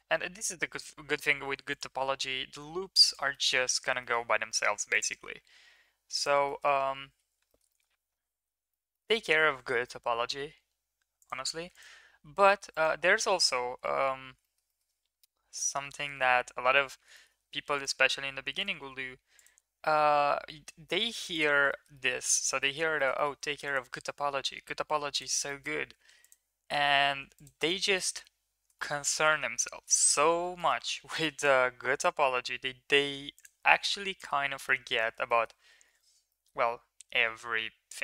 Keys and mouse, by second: 3.3 middle click, 4.0 middle click, 4.7 ctrl+r, 6.4 shift+middle click, 7.5 shift+middle click, 7.8 middle click, 8.7 shift+middle click, 9.3 ctrl+r, 11.6 ctrl+r, 13.1 ctrl+z, 13.8 shift+middle click, 14.3 shift+middle click, 14.7 middle click, 16.6 middle click, 17.1 shift+middle click, 17.5 ctrl+r, 18.8 ctrl+r, 21.7 middle click, 21.9 middle click, 22.3 shift+middle click, 23.1 middle click, 23.4 ctrl+r, 25.4 shift+middle click, 25.9 ctrl+r, 27.8 shift+middle click, 28.0 middle click, 29.8 middle click, 30.9 ctrl+r, 34.2 shift+middle click, 34.6 middle click, 35.0 shift+middle click, 36.4 middle click.